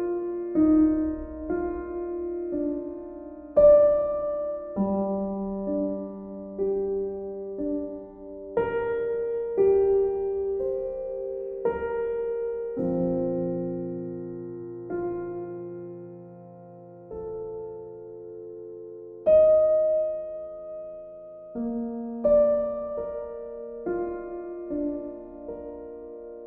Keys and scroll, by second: 25.4 e.